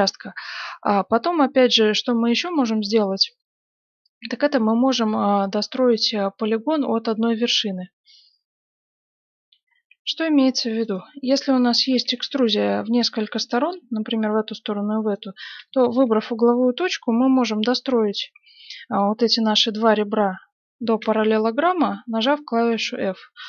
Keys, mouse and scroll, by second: 2.6-4.4 middle drag, 4.5 middle click, 8.9 F9, 10.8 right click, 12.1 e, 15.0 right click, 15.7-17.9 middle drag, 21.0 f.